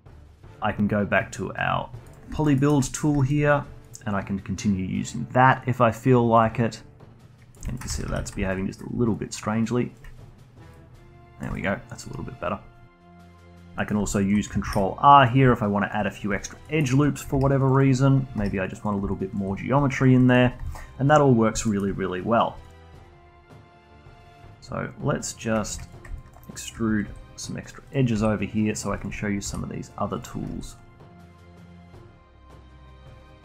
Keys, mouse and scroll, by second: 0.2-2.0 alt+middle drag, 2.0 click, 2.5 alt+middle click, 3.2-7.9 alt+drag, 7.9 ctrl+z, 8.0 ctrl+z, 8.4-13.7 alt+drag, 13.8 middle click, 14.2 alt+click, 14.6 ctrl+r, 15.6 alt+click, 16.1 scroll down 2, 16.3 alt+click, 16.6 alt+middle click, 17.3 ctrl+r, 18.4 ctrl+r, 19.1-20.2 alt+drag, 20.2 alt+middle click, 20.6 alt+click, 21.2 scroll up 1, 21.7 alt+middle click, 22.6-25.4 alt+drag, 25.9 click, 26.2 alt+click, 26.5 alt+middle click, 27.0 e, 28.1 e, 29.0 alt+click, 29.4 e, 30.5 s, 31.3 click, 31.8 s, 32.4 click, 32.9 s.